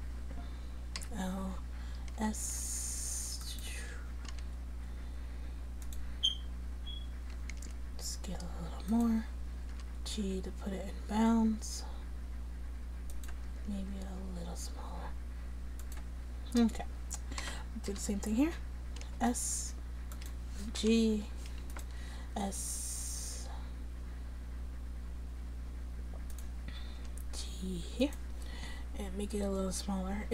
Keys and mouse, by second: 1.1 l, 2.2 s, 4.4 g, 7.6 s, 9.8 g, 13.8 s, 17.5 a, 17.9 l, 19.1 s, 20.9 g, 22.3 s, 27.1 g.